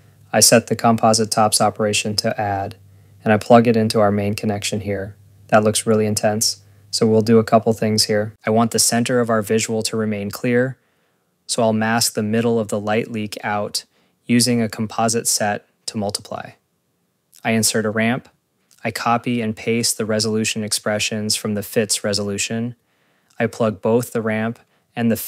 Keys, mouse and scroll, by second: 0.2 click, 0.7 scroll, 0.8 click, 1.1 click, 2.9 click, 2.9 scroll, 3.1 click, 3.8 click, 4.1 scroll, 4.7 ctrl+s, 5.5 click, 7.0 click, 7.6 click, 12.4 Tab, 14.6 Return, 15.3 click, 16.7 Tab, 18.3 Return, 18.8 click, 20.3 click, 20.5 ctrl+c, 20.7 click, 22.0 ctrl+v, 22.4 click, 23.6 ctrl+c, 24.5 click.